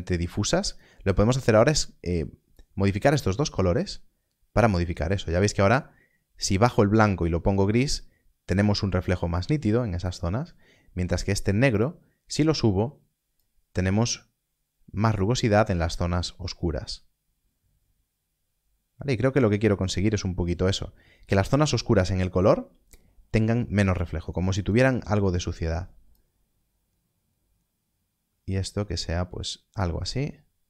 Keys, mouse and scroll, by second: 0.5 middle click, 1.3 click, 10.1 click, 20.2 click, 24.5 click.